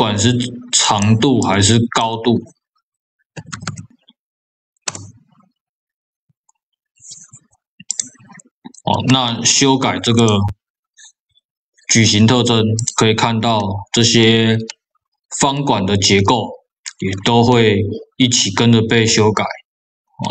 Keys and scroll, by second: 3.4 KP_0, 4.8 Return.